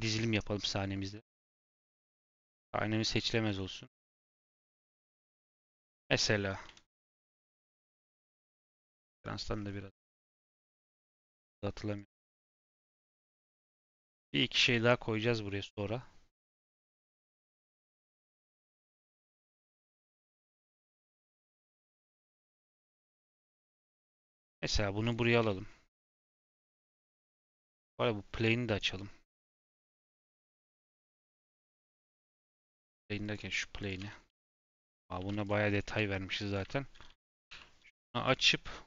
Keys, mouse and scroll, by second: 0.6 click, 1.9 click, 3.0 click, 3.4 click, 3.8 click, 4.2 scroll down 1, 4.8 scroll up 2, 5.4 shift+middle click, 5.6 scroll down 1, 6.6 KP_7, 21.0 click, 25.4 shift+middle click, 25.6-26.2 scroll up 2, 26.2 g, 26.8-27.2 scroll down 2, 27.2 shift+click, 27.5 Tab, 29.5 click, 29.8 scroll down 2, 30.1 click, 30.4 Tab, 30.6 click, 30.7 Tab, 31.2 Tab, 31.4 click, 32.6 click, 33.2 click, 33.7 click, 33.9 Tab, 35.1 1, 35.4 click, 35.7 click, 36.0 shift+middle click, 36.4 click, 36.7 shift+middle click, 37.4 o, 38.2 click.